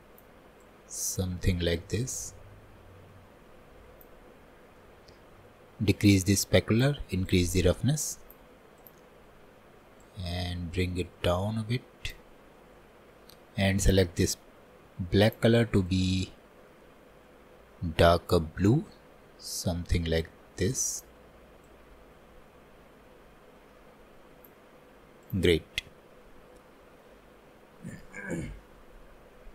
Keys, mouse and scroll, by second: 7.4-16.9 drag.